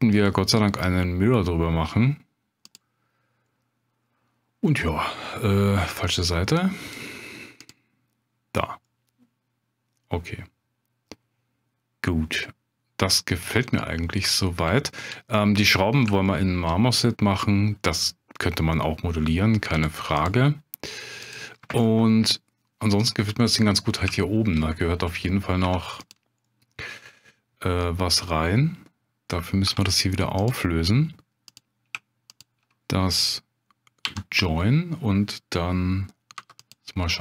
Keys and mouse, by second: 0.1-2.9 drag, 4.7-5.2 middle drag, 6.8 click, 8.8-14.1 middle drag, 14.8-15.1 shift+drag, 16.3 shift+drag, 16.3 shift+middle drag, 20.3 click, 21.8-23.2 middle drag, 24.1-24.5 shift+drag, 25.6 Tab, 26.4 click, 29.6 1, 30.4 click, 32.4 shift+click, 34.0 j, 36.4 3, 36.6 click.